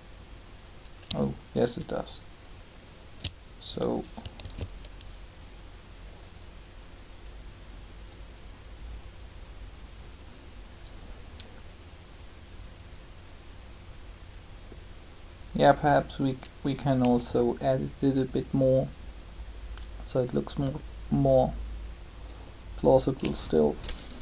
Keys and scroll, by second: 1.7 ctrl+y, 5.6 alt+a.